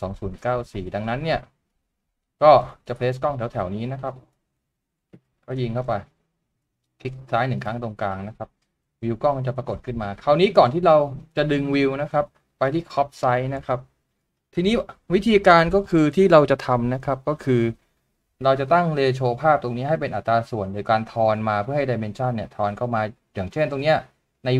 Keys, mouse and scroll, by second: 2.8 middle click, 12.2-13.3 scroll down 1, 17.6 double click.